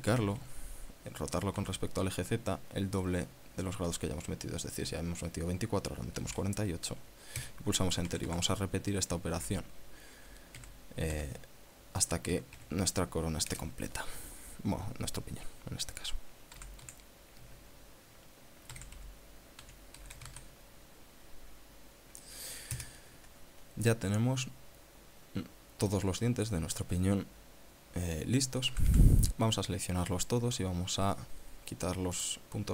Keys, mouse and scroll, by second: 0.5-2.2 typing, 6.9 KP_4, 8.0 KP_Enter, 8.7 a, 10.0 shift+d, 11.2 r, 11.8 z, 13.0 KP_9, 13.2 KP_6, 14.1 KP_Enter, 15.0 scroll down 2, 17.2 a, 19.2-20.7 typing, 23.4 KP_Enter, 24.5-26.7 drag, 29.3 a.